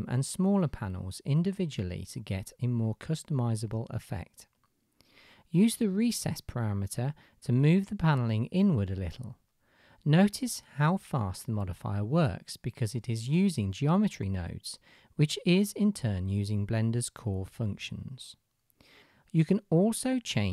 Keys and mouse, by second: 2.3 middle click, 8.0-10.3 shift+middle drag, 10.9-12.3 shift+middle drag, 14.0-15.0 shift+middle drag.